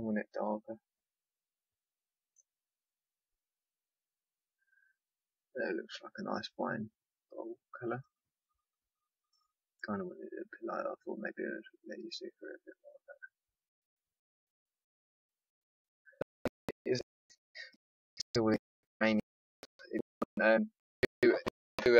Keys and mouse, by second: 7.9 click.